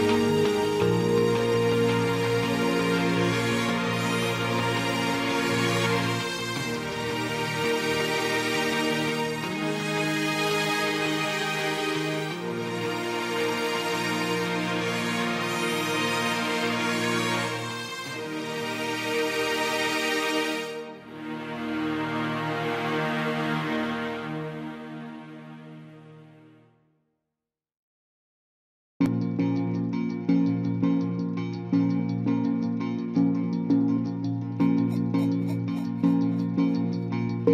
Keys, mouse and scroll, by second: 17.4 ctrl+j, 25.7 ctrl+t, 37.2 ctrl+j.